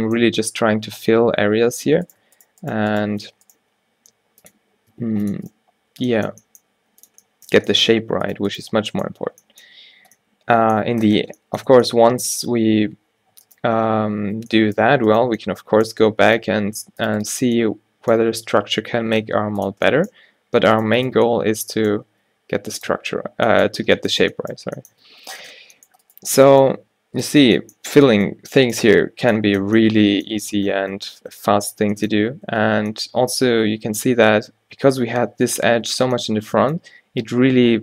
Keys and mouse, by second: 0.9 alt+w, 2.1-3.3 drag, 3.3 f, 3.7 g, 5.1 ctrl+r, 6.8 g, 8.7 f, 9.1 Tab, 11.8 Tab, 13.2 Tab, 13.4 Tab, 14.4 o, 16.7 a, 18.8 g, 22.2 g, 23.0 Tab, 25.0 Tab, 27.3 f, 27.5 Tab, 31.8 Tab, 32.6 Tab, 36.6-37.8 drag.